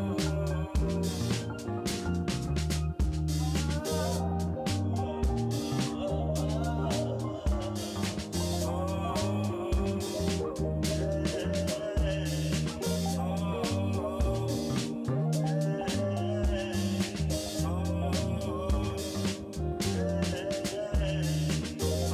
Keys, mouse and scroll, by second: 0.2 shift+middle drag, 0.8 middle click, 1.0-1.3 shift+drag, 1.3 shift+middle click, 1.9 click, 2.2 Tab, 2.5-3.7 middle drag, 4.2 3, 6.6 click, 8.2 2, 8.6 w, 9.9 w, 11.2 shift+d, 12.1 p, 12.8 Tab, 14.0 Tab, 14.3 a, 14.5-15.0 drag, 15.1 Tab, 15.4 drag, 15.8 Tab, 16.1 a, 16.4 shift+n, 16.8 Tab, 18.1 click, 19.3-20.7 shift+drag, 20.9-21.2 middle drag, 22.0-22.1 drag.